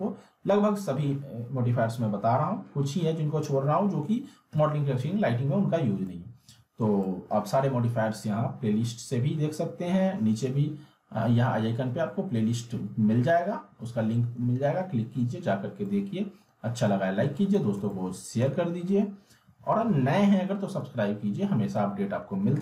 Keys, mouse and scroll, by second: 5.9 alt+Num_Lock, 6.0-7.0 alt+middle click, 7.0-7.6 alt+middle drag, 15.7-17.4 alt+Num_Lock, 17.9-18.5 alt+middle drag.